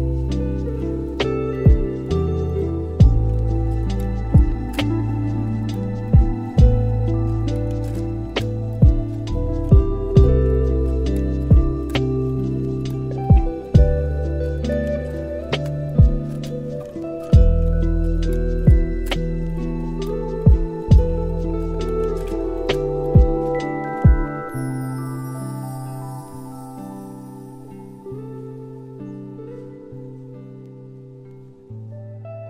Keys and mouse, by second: 1.6-2.0 middle drag, 2.3 shift+d, 4.8-5.2 middle drag, 6.0 shift+middle click, 6.3-9.7 middle drag, 10.5 click, 11.1 shift+click, 13.1 ctrl+z, 13.6 shift+click, 15.1 g, 18.1 middle click, 20.0 click, 21.0-21.4 middle drag, 22.1-23.4 middle drag, 25.7 =, 26.7 middle click, 28.3 click, 29.4-31.1 drag, 31.3-31.6 middle drag, 31.7 middle click.